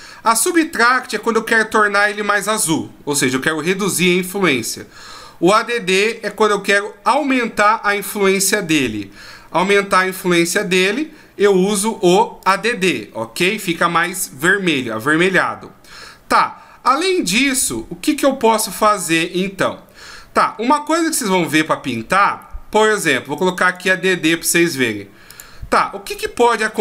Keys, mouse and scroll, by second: 12.4 click, 20.4-23.7 scroll up 2, 23.7 click, 25.9-26.3 scroll up 1, 26.3-26.8 scroll down 1.